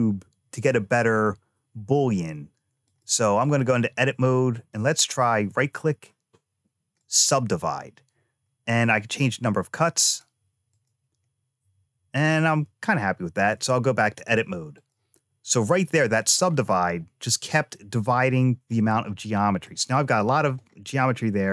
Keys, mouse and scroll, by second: 2.7 click, 4.4-7.1 right drag, 9.8 click, 10.5 click, 13.2 click, 14.1 click, 18.6 middle click, 20.4 click.